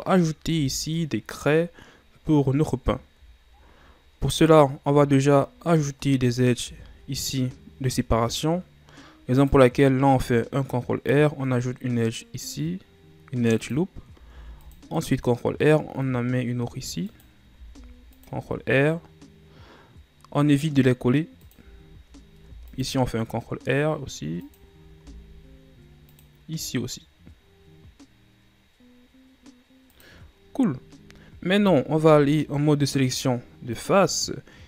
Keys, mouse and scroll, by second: 0.4 KP_7, 1.8-2.5 scroll up 1, 2.5-3.3 ctrl+scroll down 4, 3.3-4.3 shift+scroll up 2, 4.3 right click, 6.6 ctrl+r, 14.2 ctrl+r, 17.5 ctrl+r, 21.8-22.4 ctrl+scroll up 5, 22.4 ctrl+r, 24.9 ctrl+r, 32.0 ctrl+Tab.